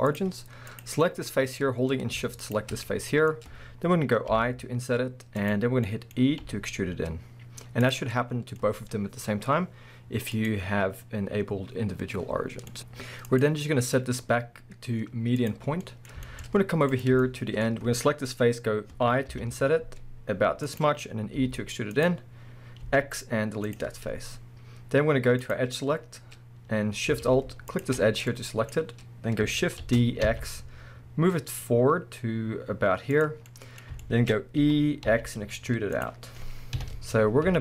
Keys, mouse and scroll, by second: 1.0-2.4 middle drag, 2.4 shift+click, 2.8-5.5 middle drag, 3.3-4.3 scroll up 2, 4.3 i, 5.5 click, 5.9-7.9 middle drag, 6.4 e, 7.9 click, 8.1 scroll down 2, 8.2-10.4 middle drag, 8.6-10.4 scroll up 2, 10.4-12.7 drag, 12.4-12.7 scroll down 2, 12.7 middle click, 13.3-15.8 drag, 15.7 scroll down 2, 15.8-16.9 middle drag, 16.4-16.9 scroll up 2, 16.9 click, 17.2-20.8 shift+middle drag, 17.7-19.3 scroll up 2, 19.3 i, 20.8 click, 21.0-21.4 scroll down 2, 21.4 e, 22.1 click, 22.4-22.8 scroll up 2, 22.8 x, 25.4 click, 25.8-26.4 scroll up 1, 27.7 alt+shift+click, 28.0-28.3 scroll down 1, 28.3-33.3 middle drag, 28.8-29.8 scroll up 1, 29.8 shift+d, 33.3 click, 33.5-34.3 middle drag, 34.6 e, 36.0 click, 36.3 scroll down 1, 36.7 KP_1, 37.5 z.